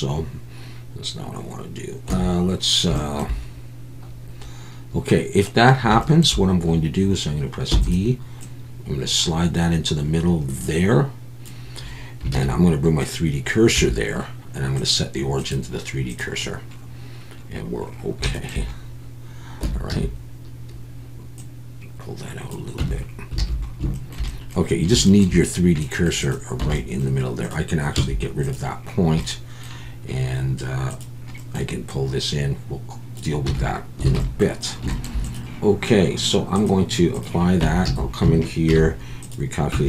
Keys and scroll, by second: 2.1 Tab, 7.7 e, 12.3 shift+s, 13.8 Tab, 19.6 Tab, 19.9 a, 22.8 Tab, 23.5 alt+a, 26.6 Tab, 27.9 x, 33.5 Tab, 34.1 alt+a, 37.6 Tab, 37.9 a, 38.7 alt+n, 39.7 Tab.